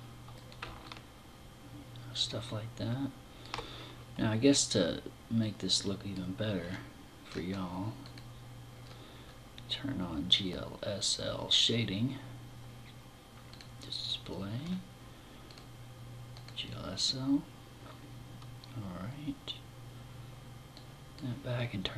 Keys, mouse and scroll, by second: 0.3 middle click, 4.8 click, 6.0-6.4 scroll down 4, 6.7 scroll up 3, 7.4 click, 8.1-8.6 scroll down 4, 12.9 click, 14.0-14.7 scroll down 2, 14.9 click, 16.0 click, 20.2 click, 21.7 click.